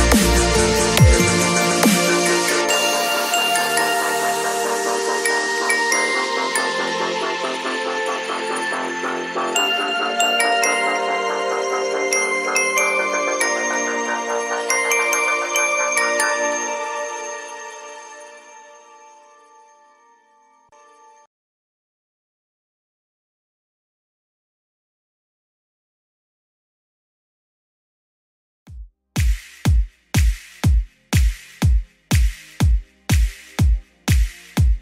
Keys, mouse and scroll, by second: 25.5 space, 28.1 space, 32.9 space.